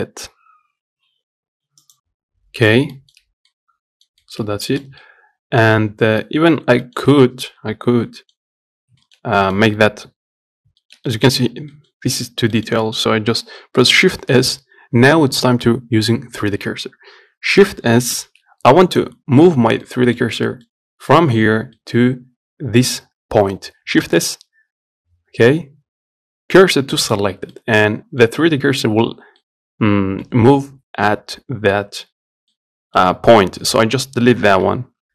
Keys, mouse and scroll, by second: 2.7-3.2 scroll up 1, 3.2 middle click, 3.5-3.8 scroll up 1, 3.8 middle click, 4.7 scroll up 2, 4.9-6.2 shift+middle drag, 6.2 scroll down 1, 6.5 middle click, 7.0 scroll down 1, 7.1-9.0 shift+middle drag, 9.0 scroll up 1, 9.3-15.5 shift+middle drag, 18.5 shift+s, 19.8 scroll down 2, 20.1-24.3 middle drag, 24.3 shift+s, 27.8-32.3 middle drag, 32.3-32.8 scroll down 2, 32.8 middle click, 33.6-34.7 scroll up 2, 34.7 scroll up 1, 34.9 Delete.